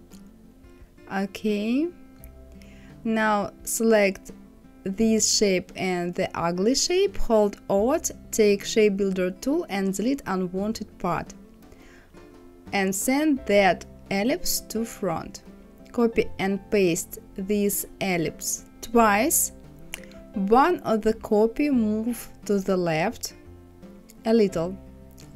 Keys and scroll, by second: 15.2 ctrl+c, 18.8 ctrl+f, 19.4 ctrl+c, 20.0 ctrl+f, 23.4 Left, 24.9 Up.